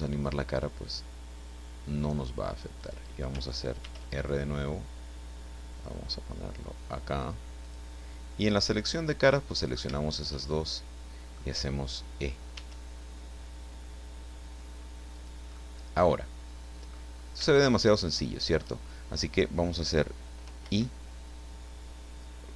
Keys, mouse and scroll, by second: 0.4-3.0 drag, 3.8 ctrl+r, 4.2 ctrl+click, 7.6 click, 8.7 click, 9.6 click, 9.8 shift+right click, 10.1 shift+right click, 10.4-11.5 shift+middle drag, 12.5 e, 15.2 click, 15.6-17.0 middle drag, 17.1-17.4 scroll up 3, 17.4 shift+scroll down 2, 17.5-18.8 shift+middle drag, 19.0 shift+scroll down 3, 20.6 i.